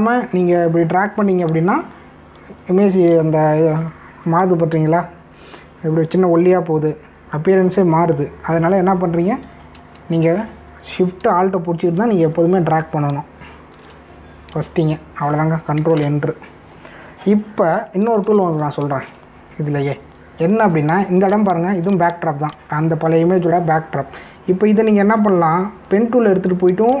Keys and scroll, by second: 10.7 ctrl+z, 17.0 ctrl+Return, 19.1 ctrl+=, 20.5 space.